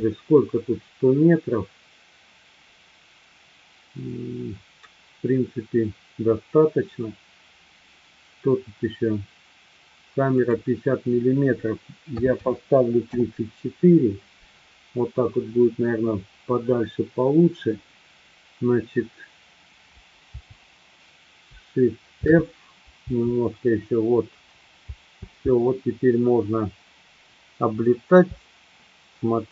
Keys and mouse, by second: 10.3-14.4 drag, 20.3 Up, 22.3 shift+f, 24.8 Left, 25.3 Left, 26.3-28.1 Left.